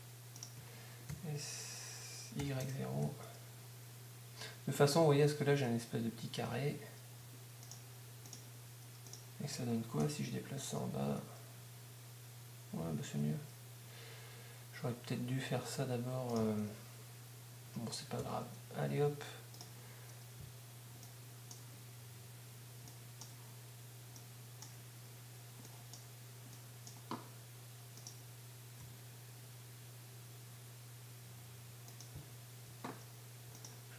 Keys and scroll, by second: 2.1 s, 10.1 g, 18.2 g, 20.1 g, 30.1 g.